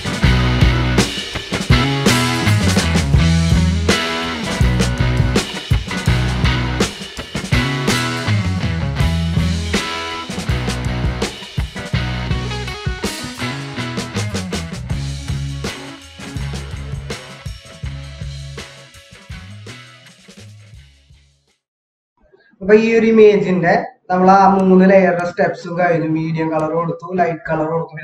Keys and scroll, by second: 8.0 ctrl+-, 10.2 ctrl+-, 16.7 ctrl+=, 19.1 ctrl+-, 19.7 ctrl+-, 20.3 ctrl+-, 21.3 ctrl+=, 22.1 F8.